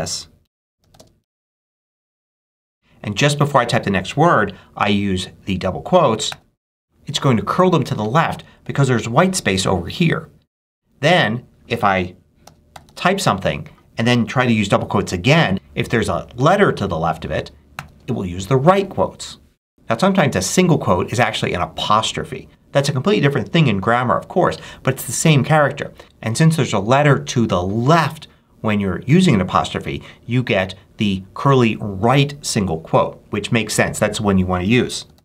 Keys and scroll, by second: 0.0-2.3 typing, 6.2 shift+', 12.3 f, 12.6 o, 17.6 shift+'.